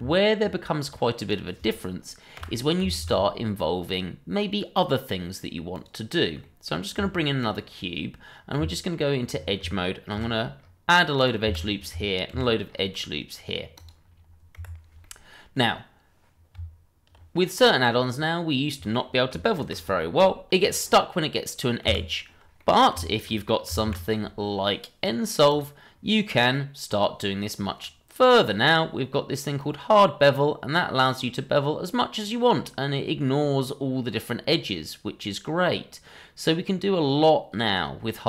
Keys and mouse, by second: 0.0 Tab, 0.8 click, 1.1 click, 2.3 Delete, 3.0 shift+a, 6.4 middle click, 6.9 s, 8.6 Tab, 10.1 ctrl+r, 11.1 click, 11.4 Escape, 12.3 ctrl+r, 13.7 click, 14.5 Escape, 15.0-15.5 middle drag, 16.5 Tab, 17.5 click, 17.9-19.0 middle drag, 19.6 ctrl+b, 21.8 Escape, 22.6 middle click, 23.0 shift+middle drag, 23.8 alt+4, 29.6 click.